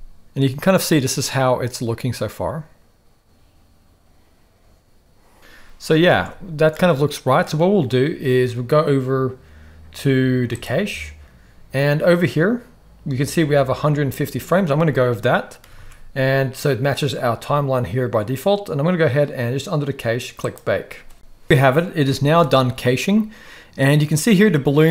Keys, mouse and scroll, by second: 5.4-5.9 middle drag, 5.4 space, 6.2 alt+a, 6.7-7.4 middle drag, 10.5 click, 15.7 ctrl+s, 15.9 ctrl+s, 20.5 click, 21.4 ctrl+s, 21.4 space, 22.0 KP_1.